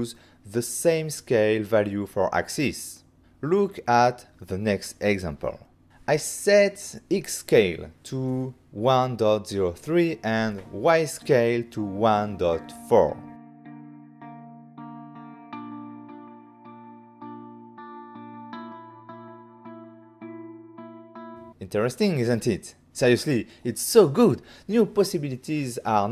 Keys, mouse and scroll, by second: 0.2 middle click, 1.7 g, 1.9 z, 3.4 click, 4.0 middle click, 7.0 ctrl+middle click, 7.9 middle click, 9.3 s, 10.1 x, 12.6-13.5 typing, 15.3 Return, 16.1 typing, 17.5-18.2 typing, 19.8 Return, 20.7 Return, 24.1 g, 24.2 z, 24.9 shift+click, 25.4 alt+a, 25.7 middle click.